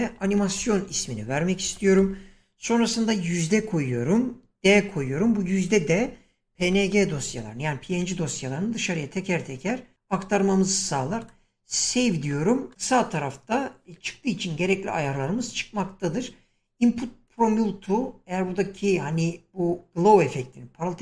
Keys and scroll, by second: 0.0-3.5 typing, 4.6-7.6 typing.